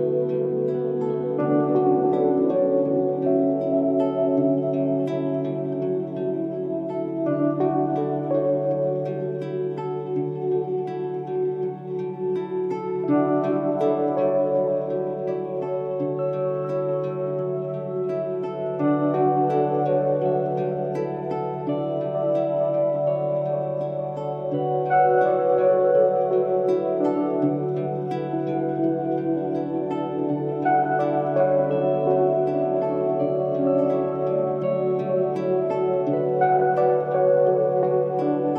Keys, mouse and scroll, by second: 8.9 m, 36.6 Escape.